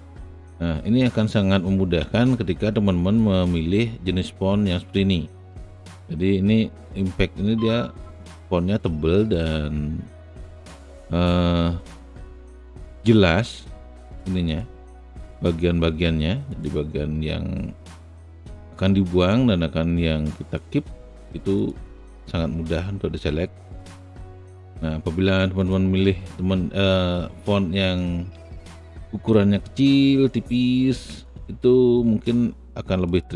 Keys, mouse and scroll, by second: 2.6 alt+shift+click, 3.3-4.9 alt+shift+middle drag, 14.6 shift+click, 16.4-19.9 shift+drag, 21.7-26.6 shift+drag, 26.8-29.9 alt+shift+middle drag, 29.9 alt+shift+click.